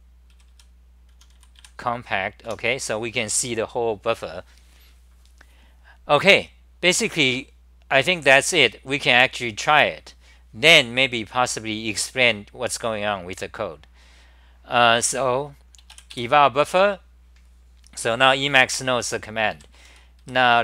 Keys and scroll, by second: 0.0-2.1 typing, 2.5 Home, 11.7-12.2 scroll down 5, 13.5-14.5 scroll down 6, 14.6-16.1 scroll down 4, 16.1-19.5 scroll down 1, 19.3-20.6 typing, 20.2 scroll.